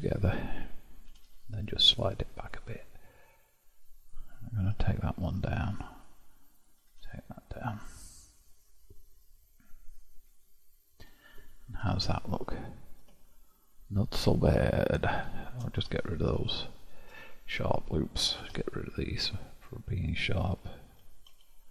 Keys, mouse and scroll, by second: 1.1 g, 4.0 click, 4.6 g, 6.5 click, 6.8 g, 10.4 middle click, 11.0-11.9 scroll down 1, 11.9 Tab, 12.5-13.2 scroll down 1, 13.2-15.8 shift+middle drag, 15.8 Tab, 16.6-18.4 shift+middle drag, 18.4 2, 19.6 alt+click, 21.0 q.